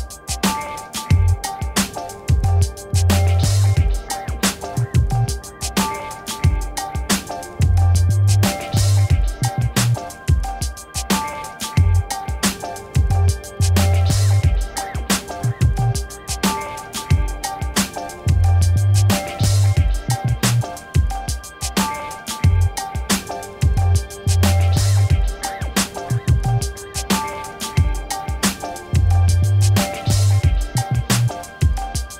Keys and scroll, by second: 2.1 Return, 6.7 m, 10.1 BackSpace, 10.4 ctrl+d, 17.6 v.